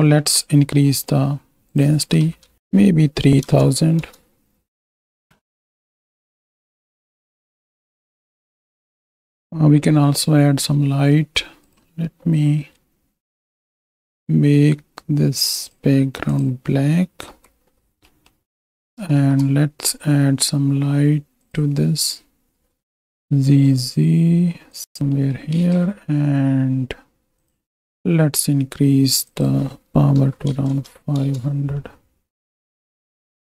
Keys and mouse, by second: 0.3 click, 0.8 click, 1.7-4.3 drag, 2.5 shift+Right, 5.1 ctrl+space, 5.3 click, 5.6 click, 6.0 click, 6.5 drag, 6.8 g, 7.0 x, 9.1 middle click, 10.2 n, 15.7 click, 17.3 n, 18.2 middle click, 19.7 shift+a, 22.9 alt+g, 23.5 g, 23.7 z, 24.7 click, 25.3 click, 26.0 ctrl+space, 28.4 click, 29.2-31.2 drag, 30.7 KP_0, 32.5 click.